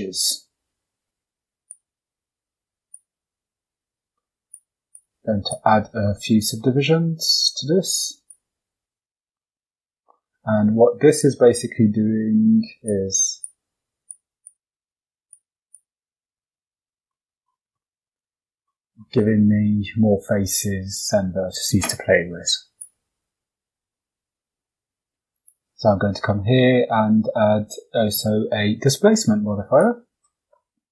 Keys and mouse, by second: 1.3 click, 2.8 click, 4.3 click, 4.8 click, 5.4 click, 6.0 shift+middle click, 7.7 click, 8.1 click, 10.3 shift+d, 12.8 click, 13.9 click, 14.3 click, 15.2 click, 15.6 click, 16.3 Tab, 17.7 shift+middle click, 21.4 Tab, 22.4 x, 23.2 click, 25.3-29.8 drag.